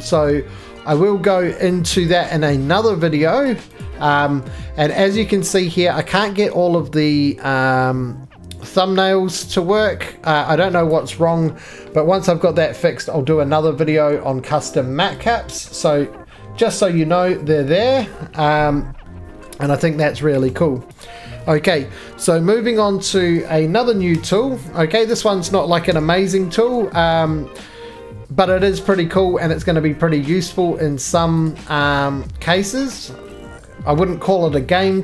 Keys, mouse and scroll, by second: 0.9 right click, 0.9 click, 1.6 click, 2.1 click, 3.4 click, 3.8 click, 5.5 right click, 10.8 click, 12.5 middle click, 15.2 click, 15.8 middle click, 16.0 middle click, 16.0 middle click, 16.1 middle click, 16.2 middle click, 16.3 middle click, 16.4 middle click, 16.5 scroll, 16.8-19.4 shift+middle click, 17.0 middle click, 17.1 middle click, 18.5 middle click, 18.5-19.4 scroll, 19.4 middle click, 19.5-20.3 scroll, 20.5 right click, 21.0 click, 22.6 scroll, 22.9 middle click, 23.2 middle click, 24.1 4, 24.3 click, 24.8 x, 25.9 1, 26.5 middle click, 26.5-26.8 scroll, 27.1 shift+middle click, 27.3 middle click, 28.6 click, 30.4 click, 31.4 click, 32.5 click, 32.8 right click, 33.6 middle click, 33.7-34.3 scroll down 17, 34.3-35.0 scroll up 4.